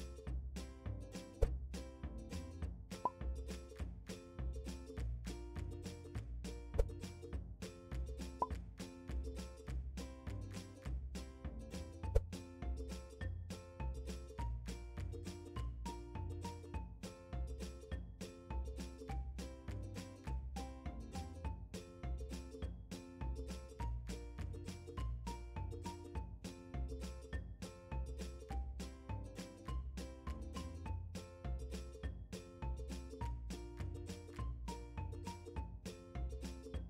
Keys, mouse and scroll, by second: 2.0 click, 4.2-16.9 drag, 6.3 Return, 13.0 g, 17.8-18.3 scroll up 1, 19.0 g, 20.3 click, 21.0 g, 24.0 click, 24.4-25.3 scroll down 2, 25.3 shift+middle click, 26.0-27.0 scroll up 3, 27.0-27.3 scroll up 1, 27.3 scroll down 2, 28.8 scroll up 1, 29.4 shift+middle click, 31.4-32.4 scroll down 1, 32.7-33.1 scroll up 1, 33.3-33.7 scroll down 1, 35.8 click.